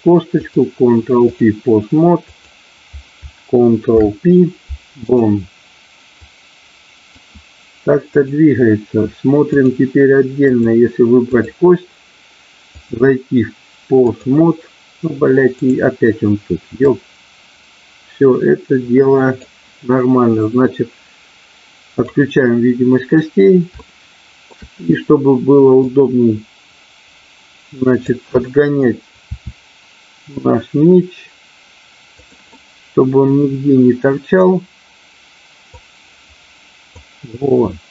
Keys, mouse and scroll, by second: 0.6 click, 2.2-3.3 drag, 3.9 ctrl+p, 6.2 click, 8.2-9.7 drag, 10.4 click, 12.8-14.3 drag, 16.9-19.4 drag, 21.9 click, 23.8 shift+middle click, 25.8-28.1 drag, 29.3 r, 32.2 click, 32.6-34.4 middle drag, 35.7-36.9 drag, 37.3-37.9 middle drag.